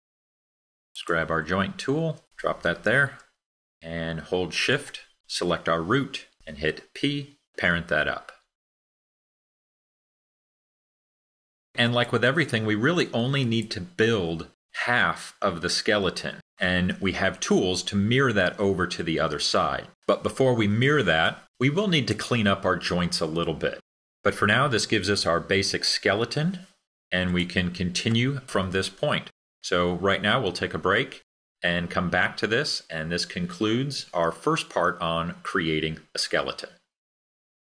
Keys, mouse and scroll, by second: 4.9-9.7 shift+drag.